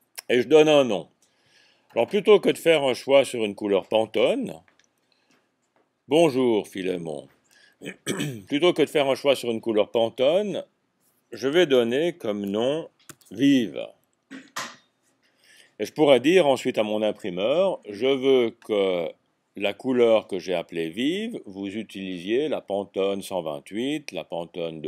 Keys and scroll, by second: 11.9-13.2 typing.